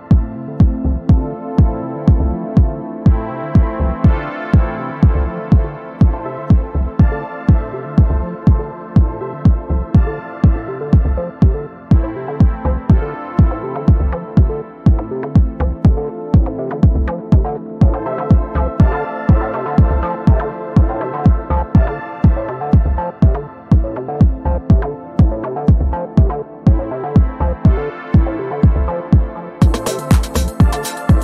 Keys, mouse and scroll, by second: 3.3 ctrl+c, 3.5 click, 5.5 ctrl+v, 5.7 Return, 6.6-7.1 ctrl+scroll up 1, 7.2-9.3 drag, 9.4-9.8 ctrl+scroll down 1, 10.8 ctrl+d, 11.0-13.2 drag, 16.1 ctrl+d, 16.2-18.4 drag, 19.7 ctrl+d, 19.8-21.0 drag, 24.0 ctrl+d, 24.1-25.6 ctrl+drag, 26.4-27.0 drag, 29.5-29.9 ctrl+scroll down 1, 30.3-31.2 drag.